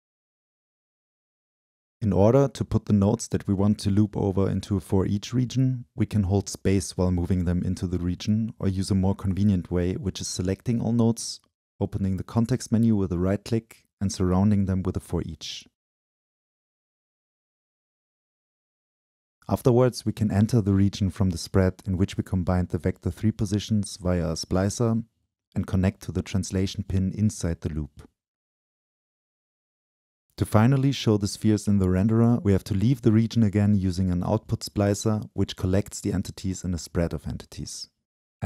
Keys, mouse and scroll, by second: 1.0 Delete, 2.0-2.4 drag, 2.4 Delete, 2.9-3.3 drag, 3.3 Delete, 3.9-4.3 drag, 4.3 Delete, 4.9-8.8 drag, 5.7 space, 9.5-10.3 drag, 10.3 Delete, 11.5-15.2 drag, 15.6-17.3 drag, 17.3-18.5 scroll down 2, 18.5 click, 18.7 click, 19.9-25.8 drag, 27.4-29.5 right drag, 29.5-31.6 drag, 29.5 scroll up 2, 33.4-38.3 drag, 36.2-38.3 scroll up 2.